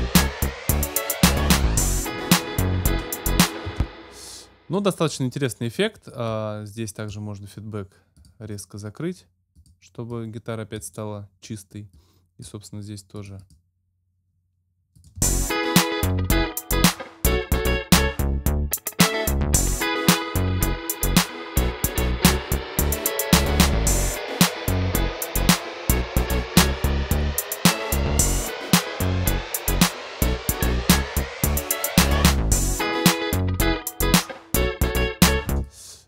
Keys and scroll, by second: 3.7 space, 15.2 space, 35.5 space.